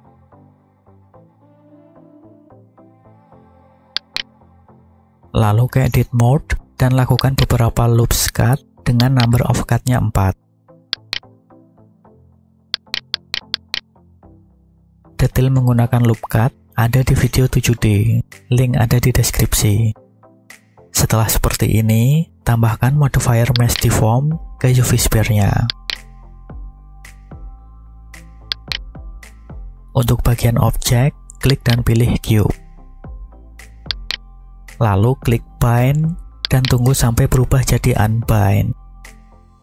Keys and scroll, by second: 0.0 1, 0.4 0, 1.3 Return, 2.6 s, 4.7 Tab, 21.4 Tab.